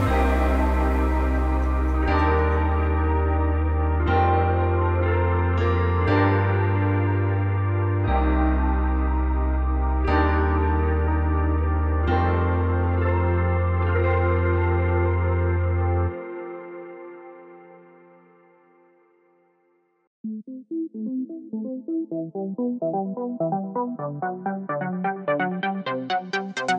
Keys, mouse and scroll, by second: 0.3 click, 1.4 click, 1.7-3.3 drag, 3.0 scroll down 2, 3.9 click, 4.8 middle click, 5.6-6.9 drag, 6.6 KP_Enter, 6.9-8.2 middle drag, 7.5-7.8 scroll down 2, 7.8-8.2 scroll up 2, 8.2 click, 8.5 click, 8.9-11.3 drag, 10.9-11.2 scroll up 1, 12.6 click, 12.8 scroll down 2, 13.0-13.8 middle drag, 13.8 click, 14.1-14.7 middle drag, 14.7 click, 15.4 middle click, 15.6 Tab, 16.2 click, 17.5 ctrl+z, 18.5 click, 19.2 click, 19.5-20.7 drag, 20.9 middle click, 21.1 Tab, 21.3 click, 21.8 click, 22.5-24.1 shift+middle drag, 22.7 scroll up 2, 23.3 scroll down 2, 23.7 Tab, 24.1 alt+click, 24.7-26.2 drag, 26.3 click.